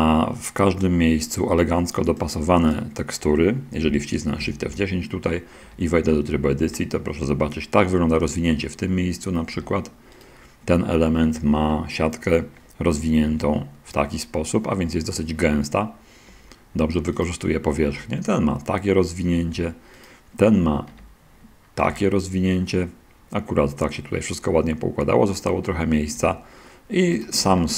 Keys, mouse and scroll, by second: 2.2-3.2 drag, 4.7 shift+F10, 5.9 Tab, 6.5 a, 8.1-8.5 scroll up 1, 8.7 middle click, 9.5 Tab, 10.5 right click, 13.6 Tab, 14.3-14.8 scroll up 1, 15.3 middle click, 16.6 Tab, 17.0-17.7 right drag, 18.2 Tab, 19.8 Tab, 20.0-20.4 right drag, 21.2 Tab, 22.1 a, 26.1 Tab, 27.5 right drag, 27.6-27.7 shift+middle drag.